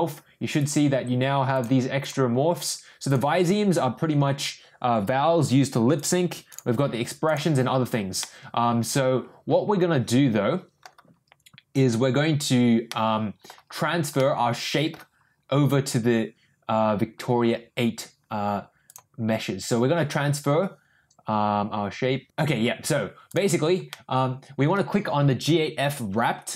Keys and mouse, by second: 0.5 click, 1.5 click, 2.0 click, 3.1 click, 6.5 click, 7.2 click, 8.2-10.8 middle drag, 12.9-13.4 middle drag, 14.1-14.9 middle drag, 23.9 middle click.